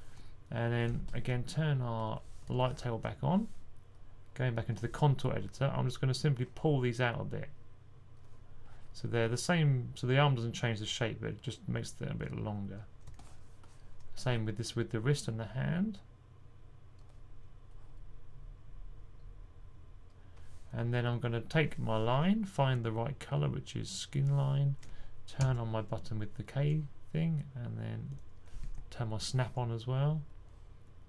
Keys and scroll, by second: 25.3 k, 28.5 super+z.